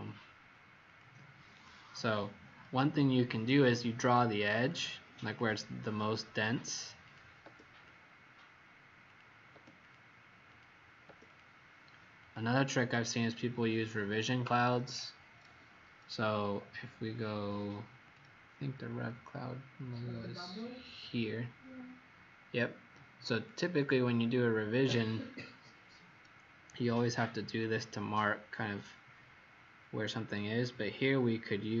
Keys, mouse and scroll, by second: 1.6-2.1 scroll down 3, 3.1 scroll up 1, 4.5 click, 6.3 click, 7.7 click, 9.8 click, 10.4 click, 11.2 click, 23.2 click, 25.3-25.6 scroll down 2, 30.3 click.